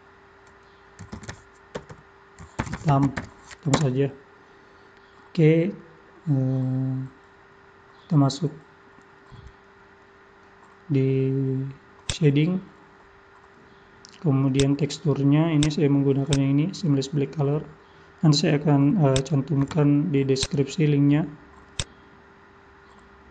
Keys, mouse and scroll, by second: 1.9 BackSpace.